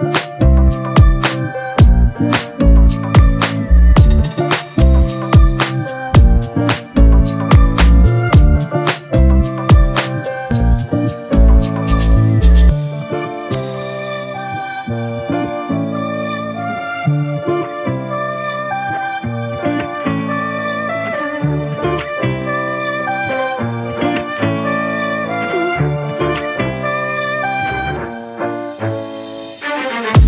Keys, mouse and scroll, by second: 1.8 ctrl+Return, 21.2 ctrl+=, 21.4 ctrl+=, 22.1 space, 23.7-24.8 typing.